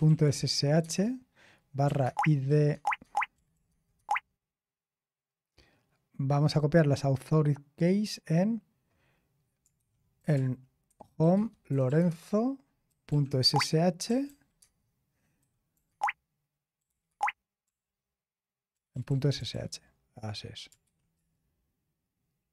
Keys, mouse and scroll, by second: 0.0-4.0 typing, 9.7-17.6 typing, 18.7-19.5 typing, 20.8 typing, 21.1 Return.